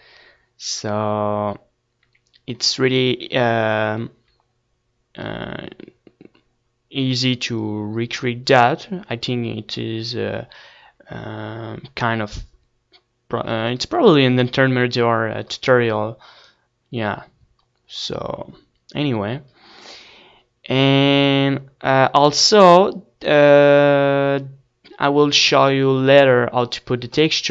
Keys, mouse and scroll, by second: 1.3 KP_1, 2.2-3.4 middle drag, 4.8-6.9 middle drag, 7.9-9.0 middle drag, 9.0-10.2 scroll down 1, 10.2-11.5 middle drag, 11.5-12.2 scroll up 1, 12.2-16.5 middle drag, 18.1-27.5 middle drag.